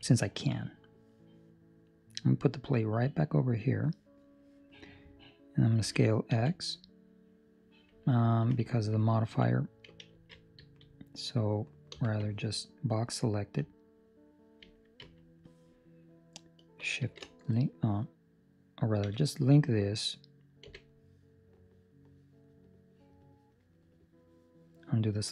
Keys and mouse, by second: 0.1 ctrl+middle click, 2.1 click, 5.8 s, 8.9 ctrl+Escape, 9.1 ctrl+middle click, 10.0 alt+a, 10.5 Escape, 11.8 b, 13.5 click, 17.1 shift+l, 20.6 c.